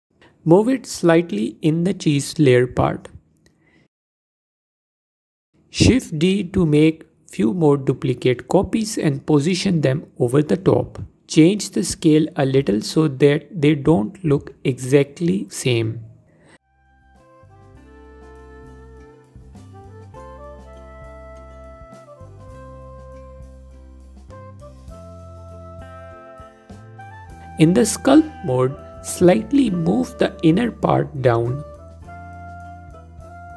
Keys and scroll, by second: 8.3 shift+d, 9.7 s, 10.9 s, 13.0 s, 16.6 ctrl+z, 17.8 shift+d, 19.8 shift+d, 20.0 s, 20.4 s, 21.6 F4, 22.2 F4, 28.5 Tab.